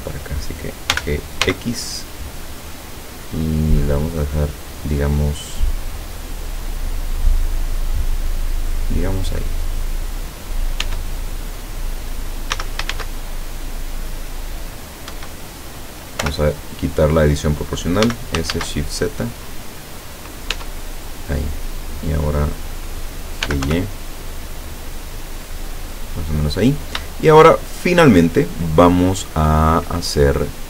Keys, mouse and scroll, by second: 1.0 g, 1.5 x, 8.9 click, 9.9-10.3 scroll down 2, 10.4-10.8 scroll up 2, 10.9 Tab, 12.6 s, 13.0 shift+z, 15.1 Escape, 16.3 o, 18.1 s, 18.6 shift+z, 20.3 click, 20.6 Tab, 23.2-24.2 typing, 25.9 click, 26.5 scroll up 2, 27.5 shift+middle click, 29.5-29.9 scroll up 2.